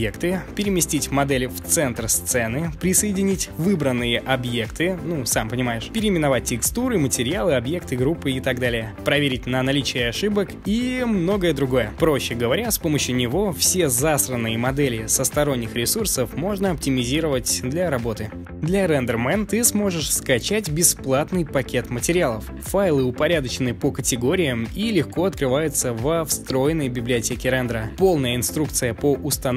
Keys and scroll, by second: 0.0-0.4 typing, 10.8 F4, 11.5 p.